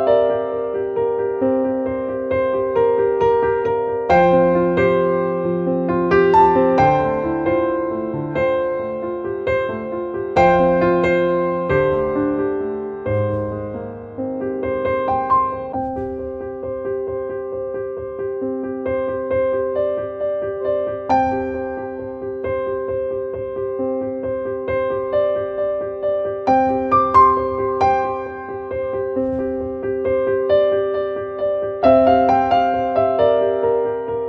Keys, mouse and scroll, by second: 1.0 click, 4.3 click, 5.6 click, 8.4 right click, 8.9 click, 10.3-14.7 drag, 18.3 click, 20.8 click, 21.9 click, 27.3 click, 30.4 click, 31.7-34.2 drag.